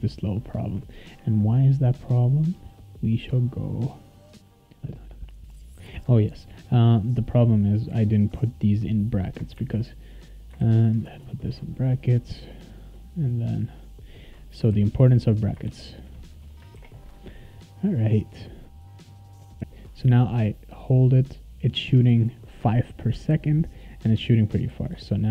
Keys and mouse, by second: 0.8 click, 4.6 click, 4.9 click, 7.1 click, 9.5 shift+[, 10.4 click, 10.6 shift+], 12.8 click, 14.4 click, 14.7 shift+[, 15.4 click, 15.6 shift+], 16.7 ctrl+s, 17.9 click, 19.1 click, 19.1-20.0 typing, 19.4-25.3 right drag, 19.5 click, 20.4-24.7 drag, 24.7 s.